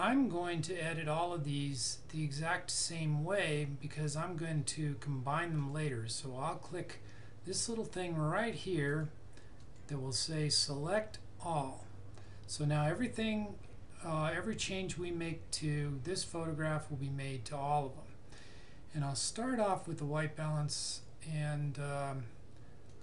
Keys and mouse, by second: 5.6 click, 20.9 click.